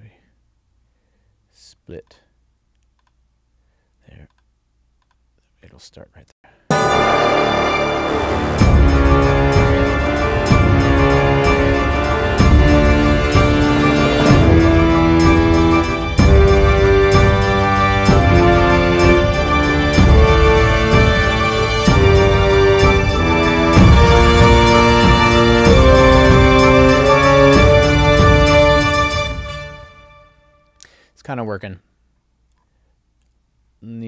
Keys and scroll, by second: 6.3 space, 29.1 space.